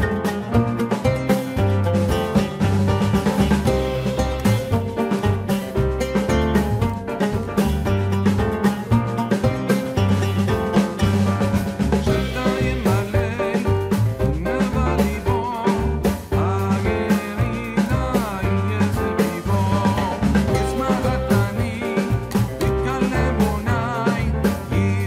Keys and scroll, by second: 2.1 Return, 5.9 ctrl+h.